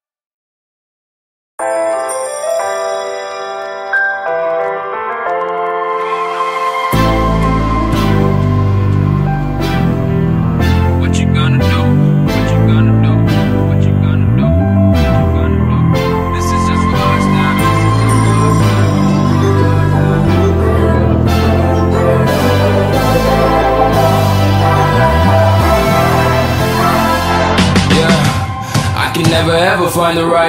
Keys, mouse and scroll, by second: 0.4-2.2 typing, 2.5-4.0 scroll up 2, 4.0 click, 4.6-6.1 typing, 6.7 click, 10.4-11.3 typing, 12.5 click, 17.3-18.7 typing, 19.4 click, 19.4 F10, 20.7-23.4 drag, 24.6 right click, 25.3 F10, 26.9 click, 27.4-28.8 typing, 28.9 Return, 29.6-30.4 drag.